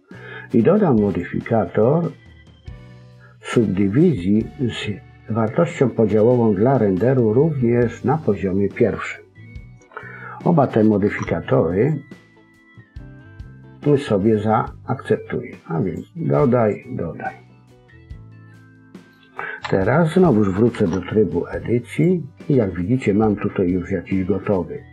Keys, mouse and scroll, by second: 1.0 click, 6.8 click, 11.0 Tab, 15.7 click, 16.5 click, 18.4 middle click, 19.6 KP_1, 20.6 Tab, 22.4-22.9 scroll up 3, 22.9-23.2 scroll down 4, 23.1 scroll up 1, 23.2 middle click.